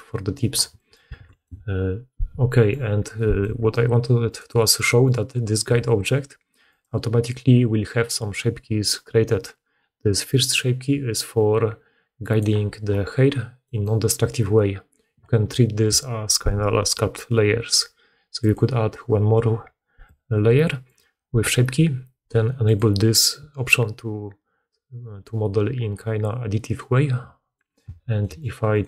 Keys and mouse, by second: 1.1 alt+a, 1.4 click, 4.2 click, 6.5 click, 10.4-22.7 drag, 27.7 Tab, 28.6 click.